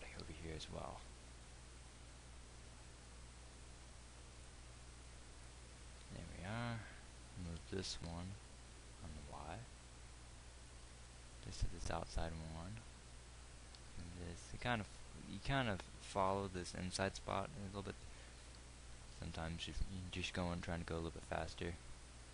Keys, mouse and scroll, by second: 8.4 g, 14.2 g, 19.7 g.